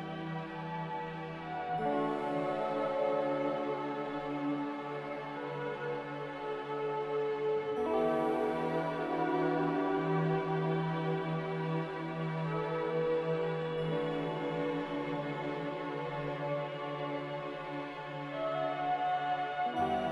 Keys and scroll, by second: 2.8 ctrl+z, 7.0 a.